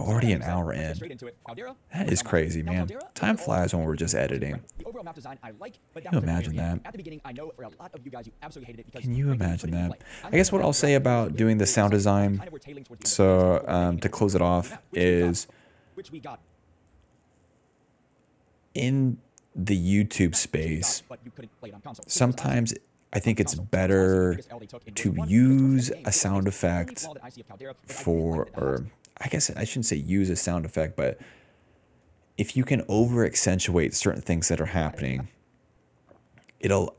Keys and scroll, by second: 1.8 d, 2.1 d, 3.1 d, 4.1 s, 5.5 s, 6.6 d, 7.4 s, 9.7 d, 12.3 s, 15.4 space, 15.9 space, 16.3 space, 17.7 d, 18.0 d, 20.2 space, 22.5 space, 23.3 space, 23.7 s, 23.9 s, 26.1 d, 28.7 space.